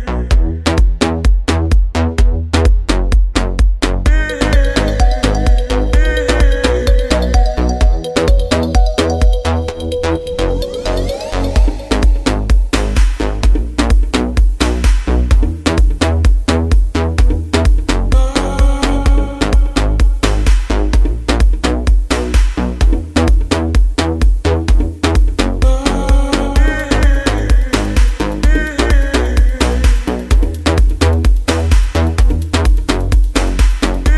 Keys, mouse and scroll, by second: 8.3-25.9 drag, 26.3 ctrl+f.